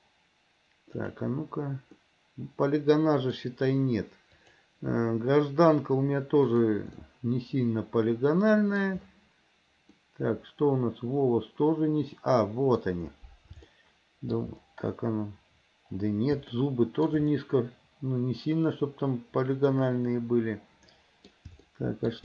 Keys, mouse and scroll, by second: 1.2 click, 2.1-3.5 middle drag, 4.6 click, 6.7 click, 7.2-9.0 middle drag, 10.1-12.9 middle drag, 13.8-14.6 shift+middle drag, 16.7-17.2 shift+middle drag, 17.5-21.4 middle drag, 21.8-22.2 shift+middle drag.